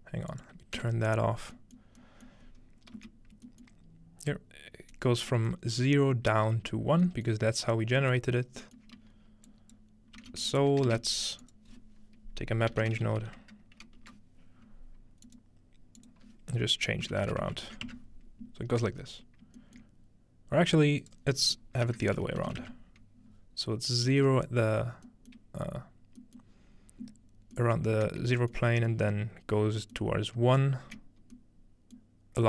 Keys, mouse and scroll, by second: 0.3-1.6 drag, 0.8 m, 1.9 middle click, 2.0-2.7 scroll up 1, 3.0 z, 5.1-5.9 scroll up 1, 5.9-7.7 scroll down 1, 9.5-9.9 drag, 10.2-10.9 typing, 10.5 ctrl+click, 12.7-13.4 typing, 14.0 Return, 15.3-17.1 drag, 17.1 -, 19.0-20.1 scroll up 2, 19.6-21.5 shift+middle drag, 21.0-22.4 drag, 24.3-26.4 shift+middle drag, 28.3 shift+middle click, 28.6 shift+middle click, 28.7-29.9 scroll down 2, 29.2 shift+middle click, 30.0 middle click, 30.4-31.1 typing.